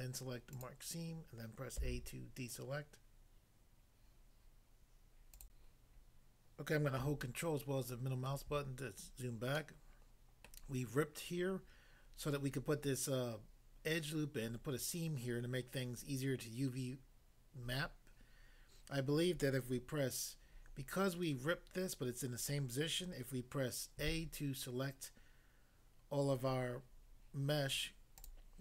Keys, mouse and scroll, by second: 0.5 click, 0.6 click, 1.8 a, 5.4 click, 6.1 click, 7.2 ctrl+middle click, 10.4 middle click, 24.0 a, 28.2 click.